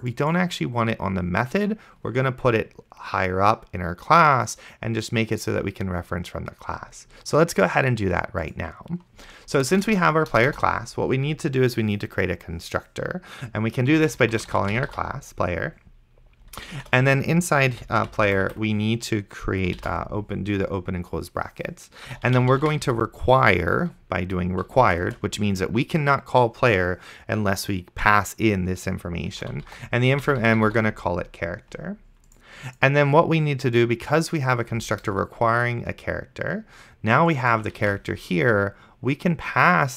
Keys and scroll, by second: 10.1 Return, 10.3 BackSpace, 14.3-15.7 typing, 17.0 shift+9, 17.8 End, 18.1 ;, 18.3 Left, 20.1 shift+[, 21.8-23.3 typing, 25.1 space, 29.2-31.4 typing, 38.1 ctrl+c.